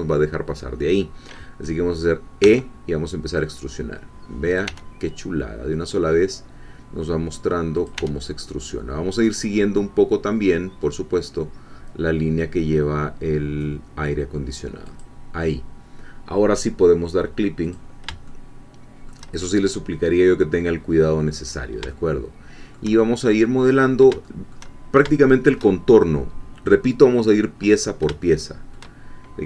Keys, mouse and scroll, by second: 2.5 e, 4.5 click, 4.7 e, 7.7 click, 7.9 e, 14.9 click, 17.6 click, 18.3 shift+middle click, 19.6-20.8 shift+scroll down 2, 20.8-21.7 scroll up 1, 21.9-23.1 shift+middle drag, 23.1-24.0 shift+scroll down 1, 24.3 shift+click, 25.1 shift+click, 28.3-29.3 shift+middle drag.